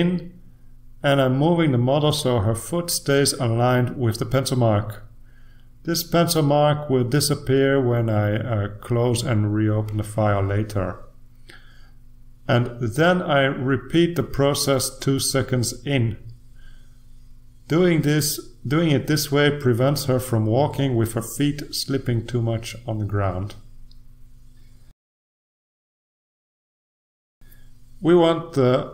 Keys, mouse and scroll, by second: 0.2 click, 4.2 click, 5.7-6.8 drag, 8.3 ctrl+z, 9.2 click, 10.0 click, 11.3 click, 12.5 click, 13.6 click, 14.4 click, 17.2 click, 18.0 click, 19.4 click, 21.5 click, 22.2 click, 23.3 click, 24.8 click, 25.9 click, 26.9 click.